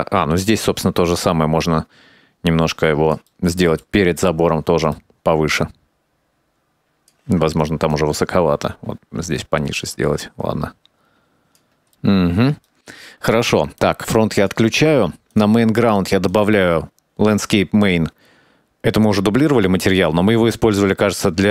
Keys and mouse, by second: 1.0-2.6 drag, 2.7 middle click, 3.0-4.1 drag, 4.2 middle click, 4.8 click, 5.1 KP_0, 5.6 middle click, 5.9 click, 7.3 KP_Decimal, 7.3 KP_0, 7.6-8.5 drag, 8.7 shift+click, 9.8 middle click, 10.1 shift+click, 10.4 KP_0, 11.0-11.9 drag, 12.8 shift+middle click, 14.9 click, 15.4 click, 16.4 click.